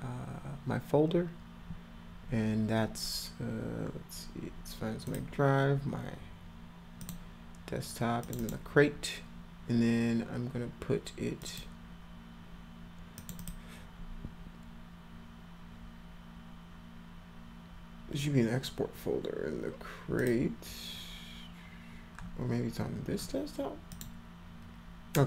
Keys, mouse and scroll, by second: 5.1 click, 7.0 click, 8.2 click, 8.4 click, 11.4 click, 12.6-13.2 scroll up 4, 13.2 click, 13.4 click, 20.2 click, 23.9 click.